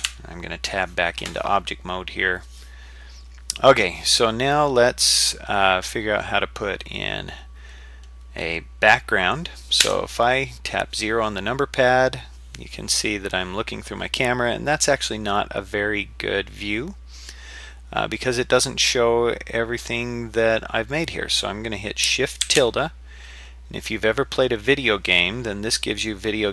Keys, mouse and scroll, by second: 0.0 Tab, 3.8 scroll up 2, 4.2-4.5 scroll down 1, 9.8 KP_0, 13.4-13.9 scroll down 1, 22.4 shift+`.